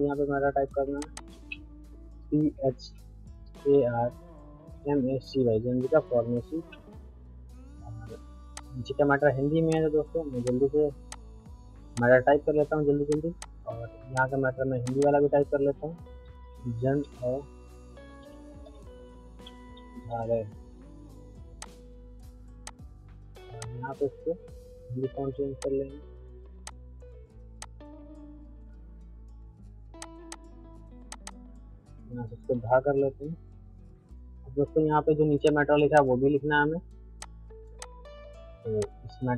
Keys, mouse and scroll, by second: 1.3 space, 2.1 shift+p, 2.5 shift+j, 3.4 shift+h, 4.4-5.7 typing, 8.5 click, 8.9 middle click, 9.7 click, 10.4 click, 11.1 click, 11.9-14.1 alt+drag, 14.1 ctrl+click, 14.6 ctrl+right click, 14.8 ctrl+click, 15.1 ctrl+a, 15.9-20.8 typing, 21.6 click, 25.6-30.0 drag, 30.2 shift+c, 30.3-32.7 drag, 32.4-33.4 typing, 34.7 middle click, 35.5 click, 35.7 c, 35.9 click, 36.2 c, 36.6 middle click, 37.2 click, 38.2 middle click, 38.8 click.